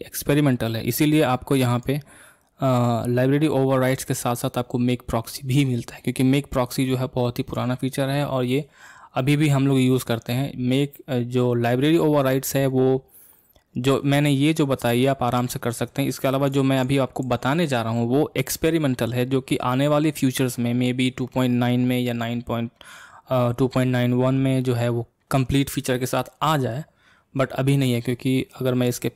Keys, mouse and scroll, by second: 16.5 click.